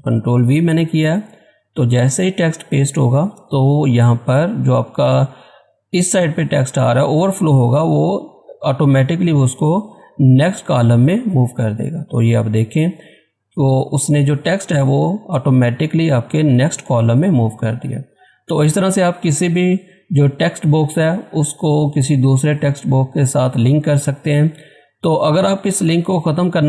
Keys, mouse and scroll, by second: 15.8-16.3 scroll up 1, 18.0-18.7 scroll down 1, 18.7 scroll up 1, 20.9 click, 25.1 click, 25.2 click.